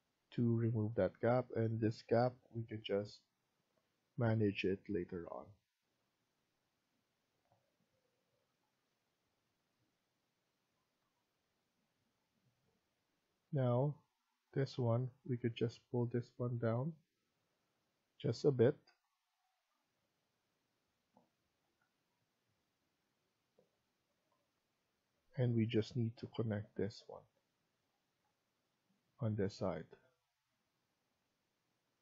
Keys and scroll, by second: 10.9 Escape, 21.5 Escape.